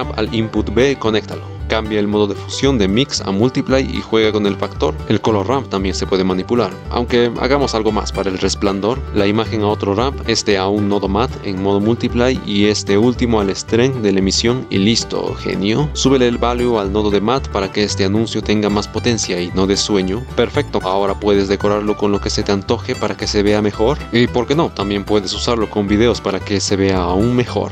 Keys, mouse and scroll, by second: 2.1 click, 3.5 click, 4.8 click, 7.3-7.9 drag, 7.9 middle click, 8.0-9.0 drag, 9.0 ctrl+shift+d, 11.5 click, 15.2 click, 18.4 click, 18.8 middle click, 20.8-21.7 typing, 23.0 click, 23.2 shift+a, 23.9 click, 24.8-26.1 drag, 26.9 click.